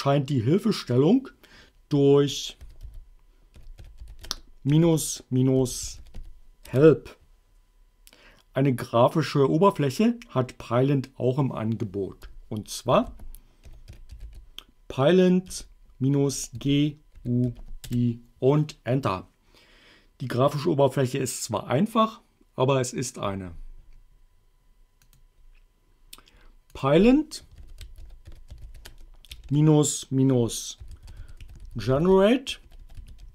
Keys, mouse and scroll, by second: 2.4-6.7 typing, 6.8 Return, 12.7-15.5 typing, 16.6 g, 17.2 u, 17.5 i, 18.0 Return, 25.1 click, 26.8 click, 27.4-29.3 typing, 30.6-33.3 typing.